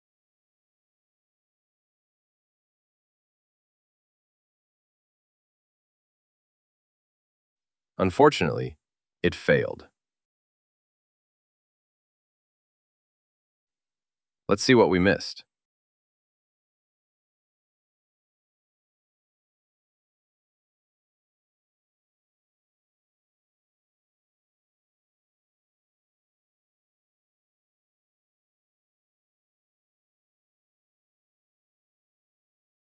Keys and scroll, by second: 15.1 super+v.